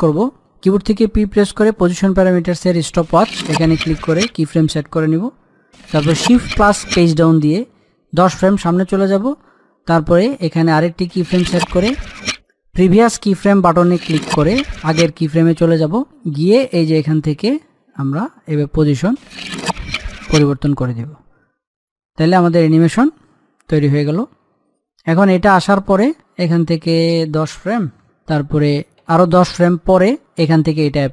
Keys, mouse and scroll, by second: 0.5 p, 2.1 click, 6.3 click, 7.4 shift+Page_Down, 10.7 click, 13.3 click, 17.4 scroll down 1, 17.7 middle click, 18.8-28.4 drag, 28.4 Page_Down, 30.5 click.